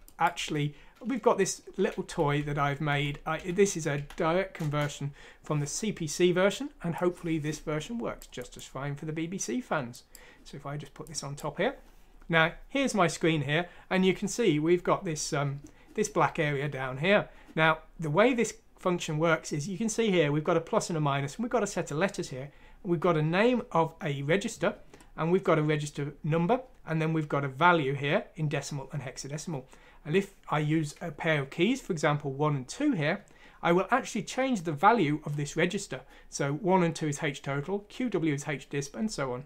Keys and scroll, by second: 0.3 F6, 4.6 Return, 4.6 typing.